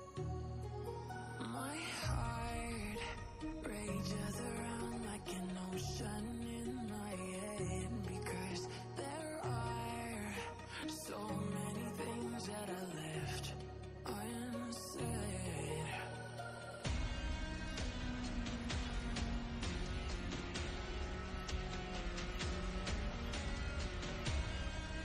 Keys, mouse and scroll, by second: 0.7 shift+click, 4.5-5.2 click, 6.3-7.0 click, 9.4-9.8 click, 10.1 ctrl+space, 10.3 ctrl+click, 10.4-10.8 ctrl+space, 11.3 click, 11.7-13.0 alt+drag, 14.7 a, 18.8-20.7 drag, 23.3-23.9 click, 24.2 click.